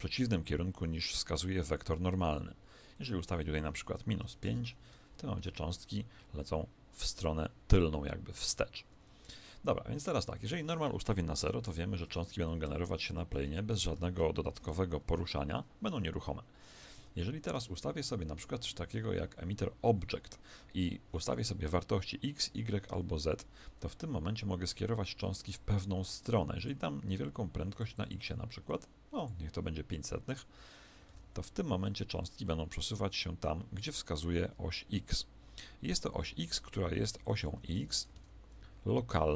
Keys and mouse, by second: 2.9 click, 5.4 alt+a, 8.9 Escape, 10.3 click, 12.4-14.6 middle drag, 13.3 z, 14.6 alt+a, 15.1-17.8 middle drag, 17.0 Escape, 26.6-31.0 drag, 31.0 alt+a, 32.4-36.5 middle drag, 36.5 r, 37.6 Escape, 39.0 alt+a.